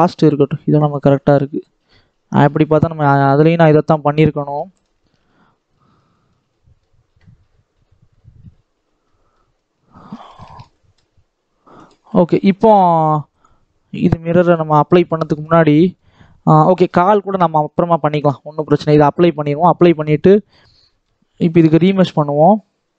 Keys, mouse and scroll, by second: 0.8 click, 1.8-2.3 scroll down 7, 2.3 middle click, 2.8-3.4 scroll down 1, 3.4 scroll down 1, 3.4 shift+middle click, 3.8-4.2 scroll up 1, 4.2 shift+middle click, 4.9 ctrl+s, 5.5 scroll down 1, 5.6-8.8 middle drag, 8.8 scroll down 1, 9.0 middle click, 9.5-10.3 scroll up 1, 10.3-11.7 shift+middle drag, 11.7 click, 12.0 middle click, 12.7 scroll down 1, 12.8 middle click, 13.3-15.1 drag, 15.1-15.7 scroll down 1, 15.7-17.5 shift+middle drag, 17.5-18.7 drag, 18.7-21.7 middle drag, 21.7 click.